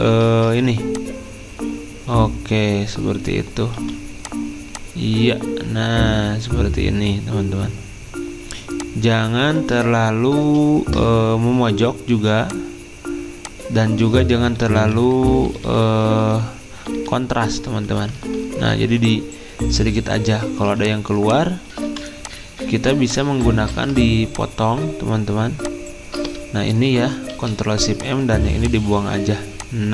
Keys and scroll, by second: 0.3 ctrl+z, 3.7 r, 9.8 ctrl+z, 10.4 ctrl+z, 14.5 Right, 14.6-16.2 typing, 23.6 ctrl+z, 27.1-27.8 typing.